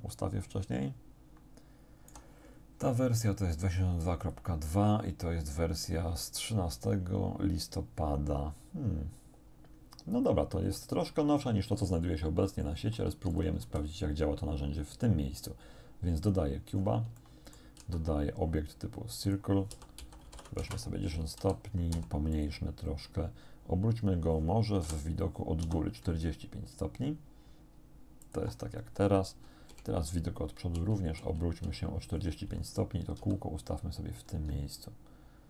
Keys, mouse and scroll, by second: 4.3 middle click, 11.9 click, 13.3 x, 13.3 click, 13.7 shift+a, 16.2 click, 16.8 scroll up 1, 17.2 shift+click, 17.8 shift+a, 19.3 click, 19.7 r, 20.0 x, 20.3 9, 20.7 Return, 21.4 z, 21.9 s, 22.4 click, 24.9 KP_7, 25.7 r, 28.3 ctrl+click, 29.7 KP_1, 30.8 4, 33.2 g.